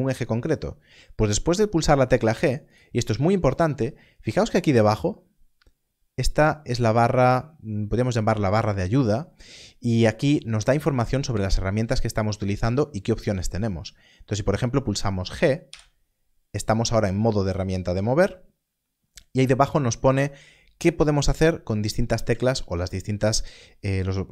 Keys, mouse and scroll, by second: 2.7 g, 15.6 right click.